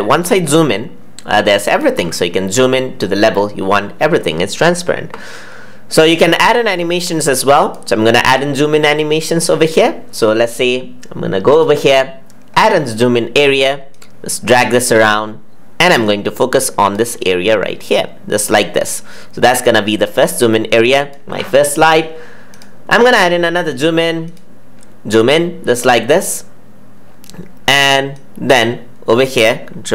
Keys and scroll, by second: 29.7 ctrl+z.